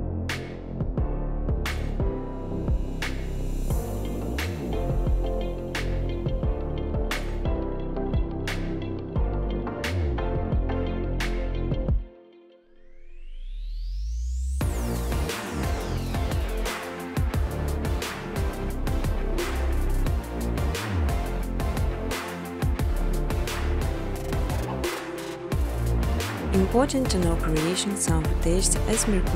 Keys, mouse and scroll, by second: 0.0-0.6 typing, 0.0 right click, 1.5 click, 1.9-4.2 typing, 5.4 click, 6.6 typing, 8.2 click, 8.6 typing, 9.5 click, 11.4 click, 13.2 click, 14.2 click, 15.6 click, 16.1 click, 16.6 click, 19.1 scroll, 21.5 click, 22.1 scroll, 23.8-25.5 scroll, 25.5 click, 25.5 scroll, 27.1-28.4 typing, 29.0 Tab.